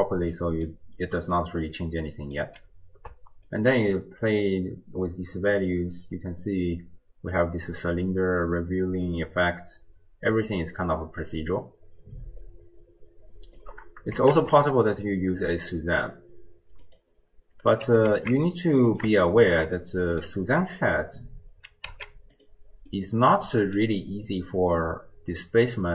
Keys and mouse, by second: 0.4 middle click, 1.5-2.5 drag, 1.6 right click, 3.5-13.6 shift+drag, 14.3 shift+a, 17.9 g, 19.4 click, 20.0 middle click, 21.9 z, 23.1-23.8 middle drag.